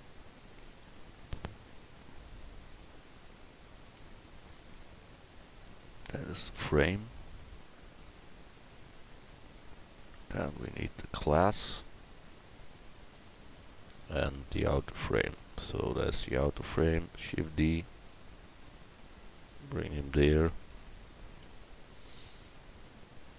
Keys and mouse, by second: 2.2-9.7 middle drag, 10.3 right click, 11.4 Tab, 11.9 Tab, 12.6 Tab, 13.9 a, 15.2 l, 16.8 shift+d, 18.9 middle click, 20.7 KP_1, 22.6 click.